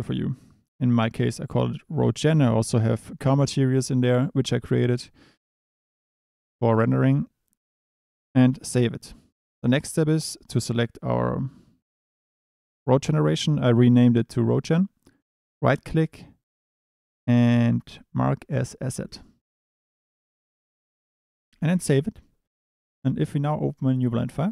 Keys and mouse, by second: 10.1 click, 15.4-19.1 middle drag, 21.7 ctrl+s, 23.6-24.5 drag.